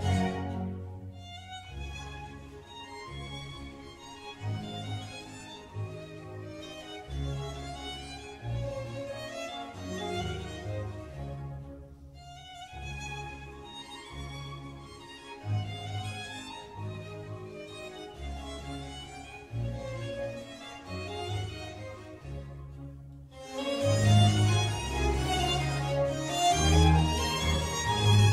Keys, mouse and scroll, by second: 0.4 click, 2.8 click, 3.2-4.8 middle drag, 4.8 click, 10.6 click, 11.9-14.9 drag, 15.4-16.5 drag, 16.9 click, 17.6 g, 20.9 Delete, 21.4 click, 21.7-22.3 scroll up 1, 22.3 click, 22.9-24.4 middle drag, 24.4 shift+click, 24.9-26.7 middle drag, 26.7 space.